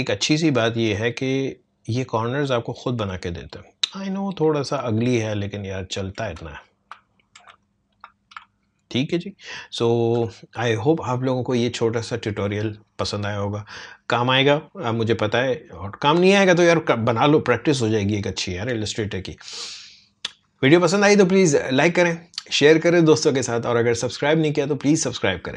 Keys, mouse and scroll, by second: 1.0 click, 2.1 alt+scroll up 1, 3.4 click, 4.2 alt+scroll up 1, 4.8 alt+scroll down 1, 6.4 space, 6.6 click, 7.5 space, 7.6 click, 8.4 alt+scroll up 1, 9.2 alt+scroll down 1, 9.7 alt+scroll up 1.